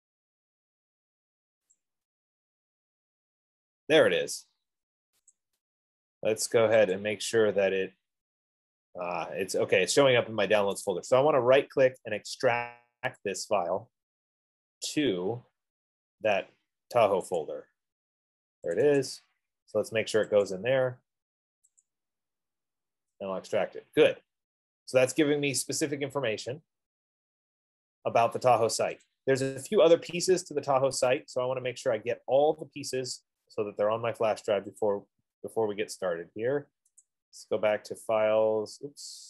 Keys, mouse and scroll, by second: 2.2 click, 5.6 click, 7.3 click, 11.3 right click, 13.8 click, 15.5 click, 17.8 click, 19.0 click, 19.3 click, 20.8 click, 22.1 click, 29.6 click, 29.7 F15, 32.6 click, 33.8 click, 35.2 click, 37.3 click.